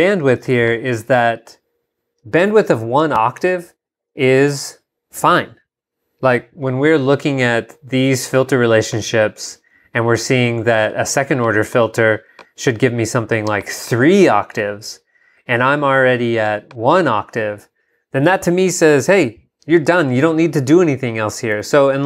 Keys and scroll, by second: 21.7 super+Tab.